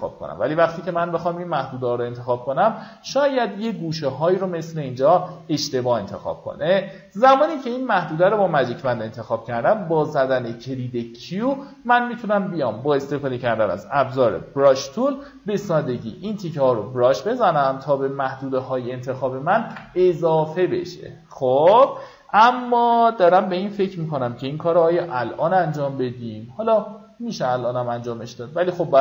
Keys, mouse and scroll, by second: 0.0 click, 1.8 alt+scroll up 1, 2.4 alt+scroll up 1, 3.9 click, 6.7-7.1 alt+scroll down 1, 8.5 q, 9.7-10.0 alt+scroll up 1, 10.2-10.7 alt+scroll up 2, 11.3-14.2 drag, 14.2 b, 15.3-18.4 drag, 20.1-20.5 alt+scroll down 1, 20.8 alt+scroll down 1, 25.4-25.7 alt+scroll up 1, 26.0-27.0 alt+scroll up 3, 27.0-29.0 drag.